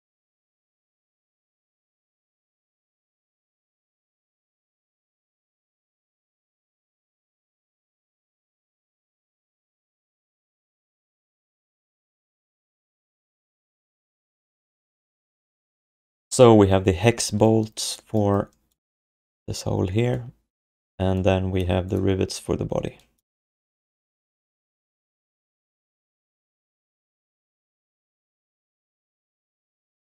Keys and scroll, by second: 9.4 ctrl+s, 22.7 1.